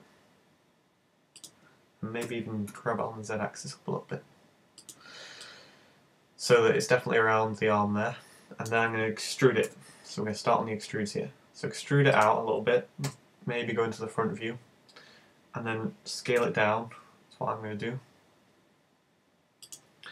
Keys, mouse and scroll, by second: 1.5 click, 2.3 g, 4.9 click, 5.5 middle click, 9.7 e, 12.3 click, 13.1 KP_1, 13.8-14.2 scroll down 5, 16.4 s, 19.7 click.